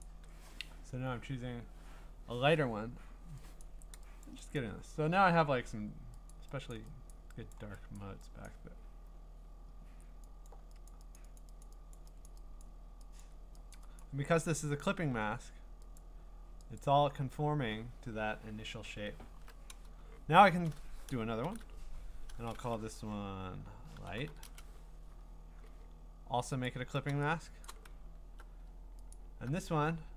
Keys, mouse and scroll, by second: 0.0 click, 3.6 click, 4.2 click, 4.6 click, 6.3 click, 6.7 click, 7.1 click, 7.5 click, 8.0 click, 8.5 click, 10.5 click, 10.9 click, 11.2 click, 11.4 click, 11.6 click, 11.9 click, 12.3 click, 12.6 click, 13.2 click, 13.7 click, 14.0 click, 16.0-17.1 alt+click, 16.8 click, 17.5-18.8 scroll down 13, 18.8-20.0 scroll up 6, 20.6-21.0 scroll, 21.4 ctrl+shift+n, 23.6-24.8 typing, 26.7 alt+click, 27.6 click, 27.7 click, 29.1 alt+click, 29.9 alt+click.